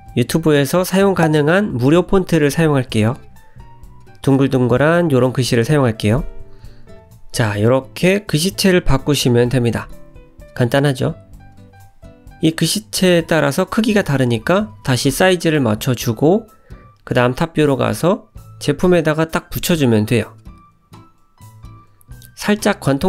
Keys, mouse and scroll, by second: 4.8-5.2 scroll down 2, 5.2 middle click, 7.3 ctrl+s, 9.5 `, 11.3-11.6 scroll up 1, 11.6 s, 12.6 g, 14.2 middle click, 15.2 `, 16.5 g, 18.7 scroll up 4, 19.1 shift+middle click, 19.7 g, 21.1 middle click, 22.6 click.